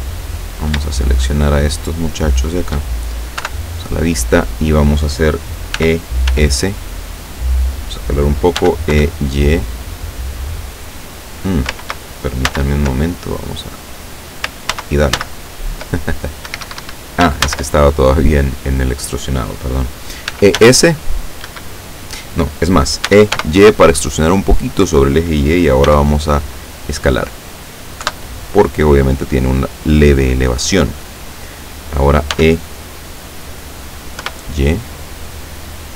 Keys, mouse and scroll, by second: 0.6 shift+right click, 1.1 shift+right click, 1.9 shift+right click, 2.2 shift+right click, 3.5 KP_7, 5.8 e, 6.3 s, 7.7 click, 8.7 e, 9.0 y, 12.5 ctrl+z, 13.1 ctrl+middle click, 14.8 ctrl+z, 16.1 ctrl+middle click, 16.5 ctrl+Escape, 17.5 ctrl+z, 18.0 ctrl+middle click, 20.3 e, 20.6 s, 21.5 Escape, 23.1 e, 23.4 y, 24.5 click, 25.9 s, 27.4 click, 28.1 KP_7, 32.3 e, 34.3 y.